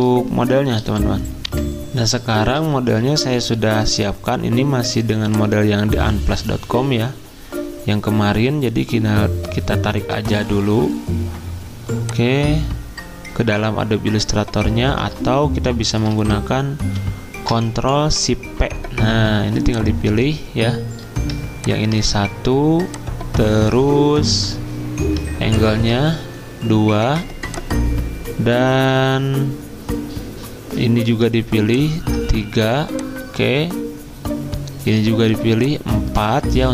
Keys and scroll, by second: 2.4 F10, 2.4 alt+Tab, 3.1 alt+Tab, 3.6 alt+Tab, 14.9 alt+Tab.